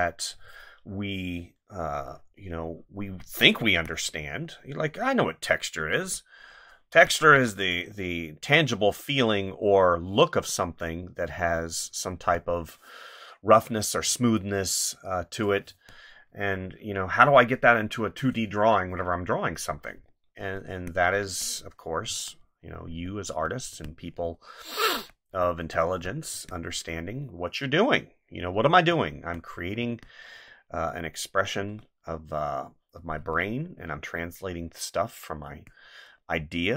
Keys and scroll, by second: 3.7 space, 6.9 space, 15.7 space, 20.7 space, 22.1 space, 23.7 space, 26.3 space, 28.7 space, 33.2 space, 35.5 space.